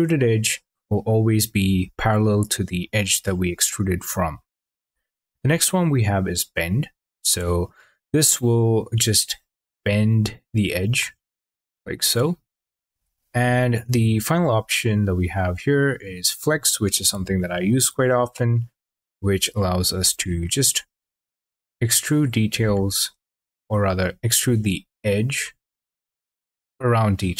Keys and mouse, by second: 4.7 ctrl+z, 5.6 click, 7.5 click, 12.8 ctrl+z, 15.1 click, 17.7 click, 20.6 click, 24.1 ctrl+z.